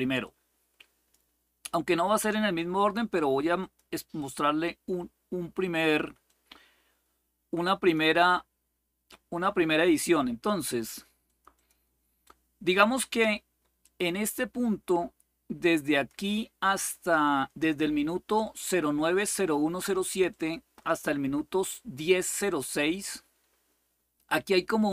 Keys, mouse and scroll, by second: 0.0 click, 3.4 click, 4.0 click, 6.0-7.7 drag, 11.0 click, 11.4 click, 13.6-16.5 drag, 20.1 click.